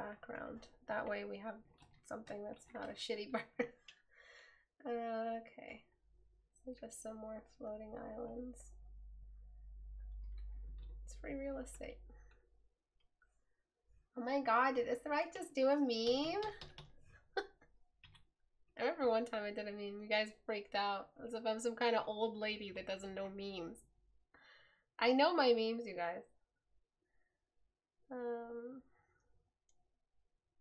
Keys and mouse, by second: 18.2 right click.